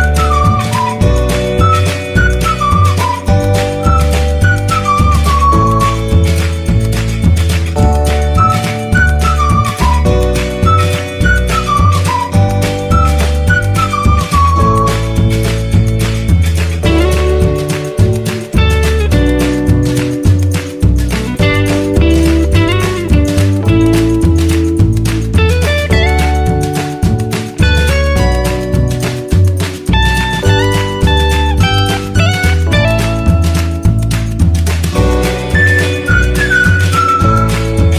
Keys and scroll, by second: 1.3 e, 1.4 z, 1.9 s, 3.3 e, 4.3 e, 4.6 s, 5.6 e, 7.1 Delete, 8.1 1, 8.4 ctrl+r, 8.9 s, 10.7 s, 11.1 a, 11.6 s, 13.6 ctrl+r, 13.7 s, 16.3 s, 16.6 r, 17.0 s, 17.9 1, 18.9 ctrl+z, 19.5-22.1 typing, 21.1 ctrl+r, 26.3 e, 26.5 s, 28.3 a, 29.2 e, 29.3 s, 29.9 1, 30.9 e, 31.4 s, 31.9 Delete, 33.7 ctrl+b, 35.0 a, 36.9 ctrl+b, 37.5 a.